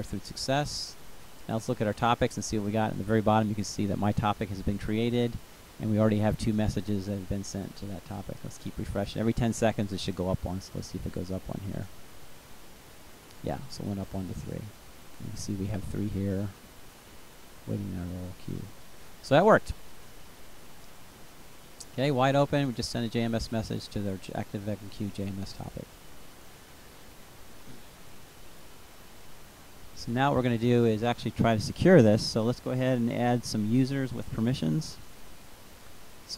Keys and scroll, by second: 31.0 Return, 32.1 Up.